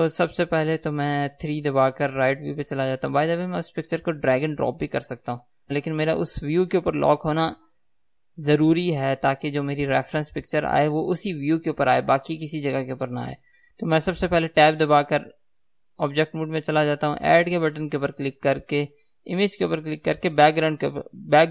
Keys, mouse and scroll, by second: 2.1 KP_3, 5.8-13.8 middle drag, 13.8-21.5 drag, 16.0 Tab.